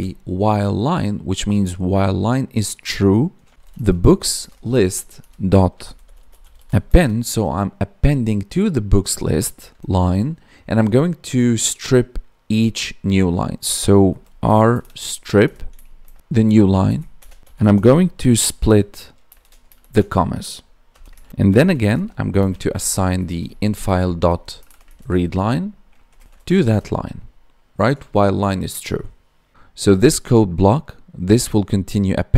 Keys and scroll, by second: 4.4 Tab, 15.3 Tab, 16.1 Left, 16.8 Right, 21.2 ctrl+s, 22.3 space, 22.7 space, 26.0 Down, 26.1 Tab, 26.6 ctrl+s.